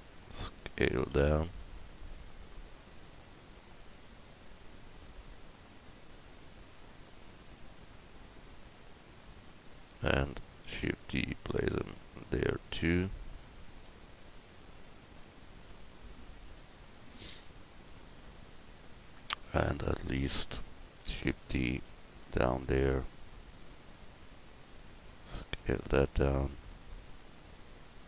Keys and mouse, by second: 1.1 s, 3.9-9.3 drag, 10.7 shift+d, 11.5-13.4 drag, 16.5 KP_1, 20.0-21.0 middle drag, 21.0 shift+d, 21.9-25.3 drag, 25.3 s, 27.7-28.0 drag.